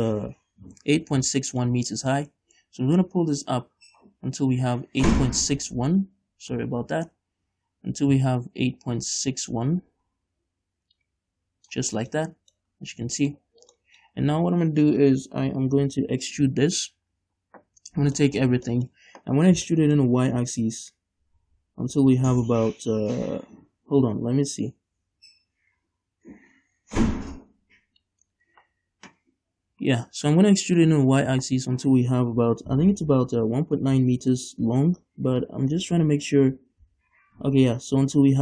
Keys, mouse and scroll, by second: 1.3 scroll down 1, 1.6-3.1 shift+middle drag, 3.1-12.1 drag, 12.1 scroll down 2, 12.3 middle click, 12.8-13.3 scroll up 2, 12.9-23.9 middle drag, 13.3 click, 13.5 right click, 13.5-13.9 scroll up 2, 17.3 click, 17.3 right click, 17.3 scroll up 2, 17.4-17.8 scroll down 2, 17.8 a, 18.1 scroll down 2, 18.5 click.